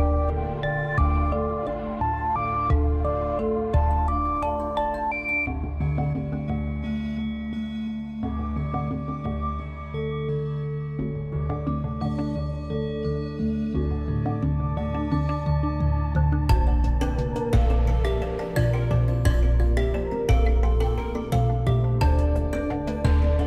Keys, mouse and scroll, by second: 1.8-2.2 scroll up 2, 2.2-2.8 shift+middle drag, 2.8 Tab, 4.9 click, 5.8-14.4 right drag, 14.4-17.4 middle drag, 22.5-23.4 drag.